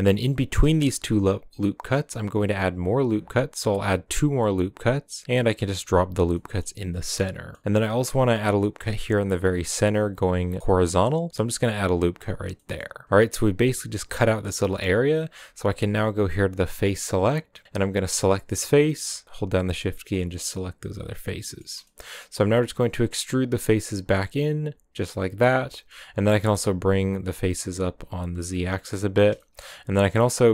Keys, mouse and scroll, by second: 0.0-1.0 middle drag, 1.0 ctrl+r, 6.3-8.0 middle drag, 8.0 scroll down 1, 8.1-10.4 middle drag, 10.4 ctrl+r, 12.5 middle click, 12.9-13.8 scroll up 2, 17.0-18.3 drag, 18.3 right click, 19.3 shift+right click, 19.6 shift+right click, 19.9-21.2 middle drag, 21.2 scroll up 2, 21.4-22.1 middle drag, 22.1-22.5 scroll down 2, 22.5 e, 25.6 middle click, 25.9 scroll up 1, 26.3 g, 28.9-30.5 middle drag.